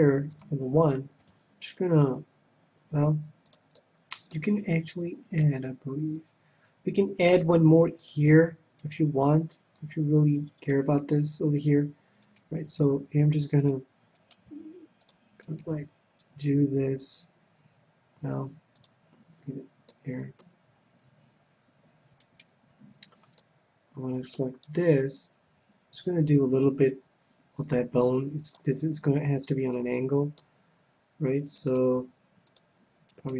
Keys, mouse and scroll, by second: 0.3 KP_1, 1.2 g, 3.5-5.4 drag, 3.9-5.5 middle drag, 5.4 ctrl+r, 8.9-10.6 right drag, 9.7 KP_1, 13.1 right click, 13.1 g, 13.7-16.7 drag, 14.2-16.0 right drag, 14.5 g, 15.7 g, 16.0-17.1 middle drag, 18.8-20.5 drag, 19.8 middle click, 19.8 right click, 20.7 middle click, 22.2-23.7 right drag, 23.4 click, 23.4-25.0 middle drag, 24.6 KP_1, 25.4 g, 29.7 click, 29.7-31.5 middle drag, 31.5-33.3 right drag, 31.9 g, 32.6-33.3 drag.